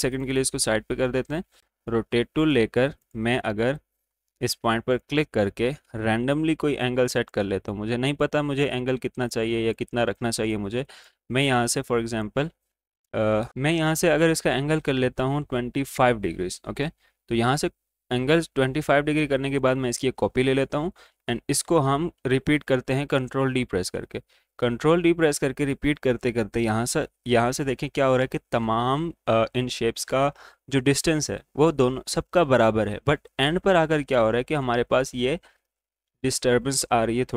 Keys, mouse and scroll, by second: 0.1 click, 2.4 right click, 3.2 click, 6.5 Down, 7.0-13.5 drag, 13.5 Down, 19.6 click, 21.5 ctrl+d, 25.5 typing, 33.3 ctrl+d, 33.3 typing, 34.4 ctrl+d, 34.4 typing.